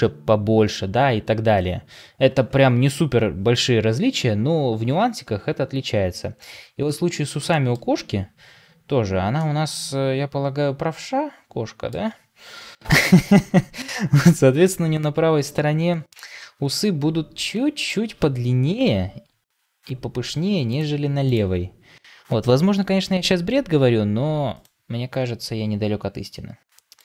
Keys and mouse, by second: 7.4 shift+middle click, 9.3-11.8 middle drag, 12.4 KP_1, 18.8 g, 21.2 click, 26.3 r.